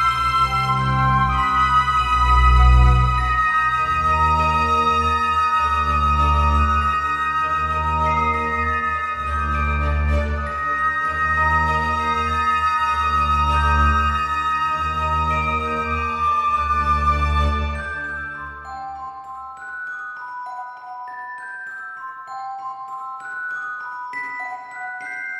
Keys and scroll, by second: 23.3 alt+x.